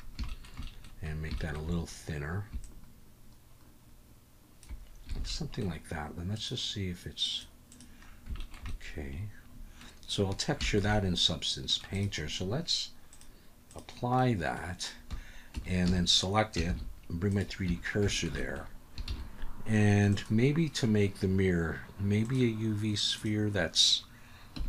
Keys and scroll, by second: 5.2 alt+a, 15.5 Tab, 15.9 a, 16.7 shift+s, 17.7 Tab, 19.1 shift+a.